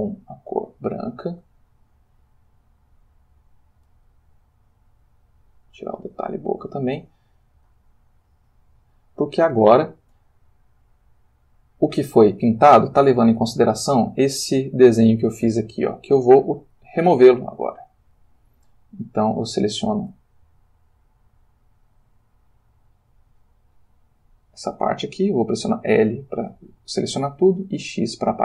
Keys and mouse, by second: 0.6 click, 5.0 click, 7.6 click, 17.2 click, 17.9 click, 19.1 click, 23.7 click, 25.9 l, 27.5 x, 28.1 click.